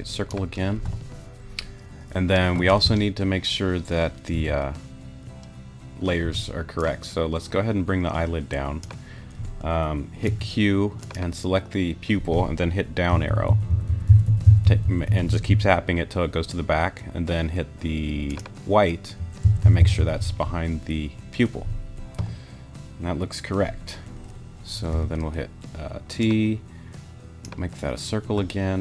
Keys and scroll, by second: 4.3 t, 6.2 t, 10.3 q, 13.1 Down, 19.5 Down, 24.9 t.